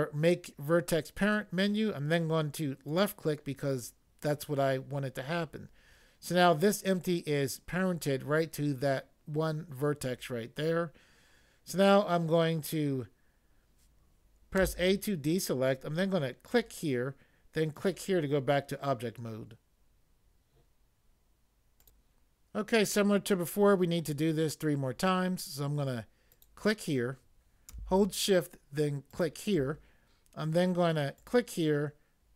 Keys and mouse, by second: 2.9 click, 14.6 a, 16.4 click, 17.7 click, 21.8 click, 26.4 click, 29.0 shift+click, 31.2 click.